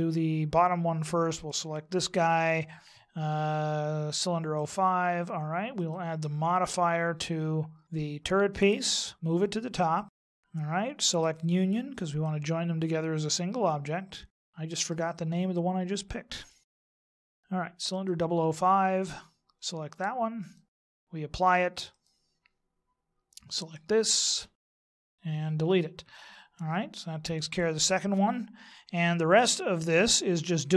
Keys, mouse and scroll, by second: 1.4 right click, 4.6 right click, 5.7 click, 9.9 click, 10.3 click, 11.0 click, 14.5 middle click, 16.4 right click, 17.0 right click, 17.3 right click, 17.9 click, 21.9 click, 23.7 right click, 24.6 g, 25.0 x, 26.2 middle click.